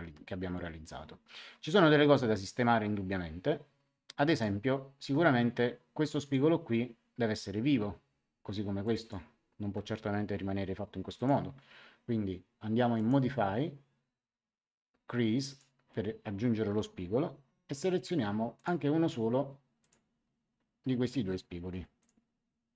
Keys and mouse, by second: 4.3 click, 6.0 click, 8.8 click, 11.1 click, 12.9 click, 15.4 click, 18.5 click, 19.8 click, 21.9 click.